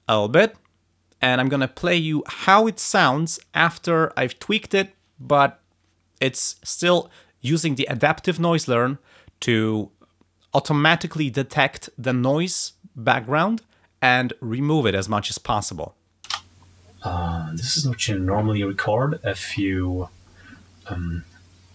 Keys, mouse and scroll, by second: 16.2 space.